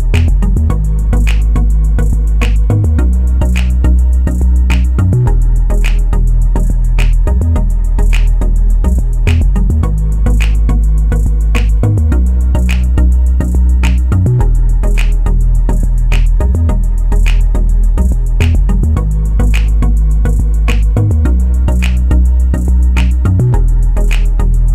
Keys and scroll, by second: 10.0 F8.